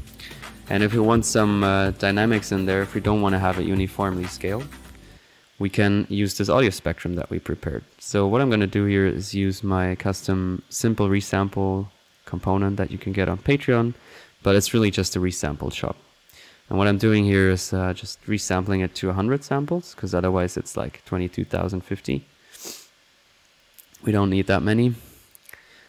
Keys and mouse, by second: 0.7-1.7 drag, 2.3 click, 3.6 click, 5.0 click, 6.3-6.8 drag, 7.1 click, 8.3 drag, 9.3 drag, 10.6 click, 12.1 click, 12.5-13.1 middle drag, 13.1-13.4 drag, 13.5-13.9 drag, 13.9-14.5 drag, 14.5 middle click, 15.3 click, 15.8 middle click, 17.4 click, 18.6-19.1 drag, 20.0 middle click, 21.4-22.7 alt+drag, 24.8 right click, 25.3 right click.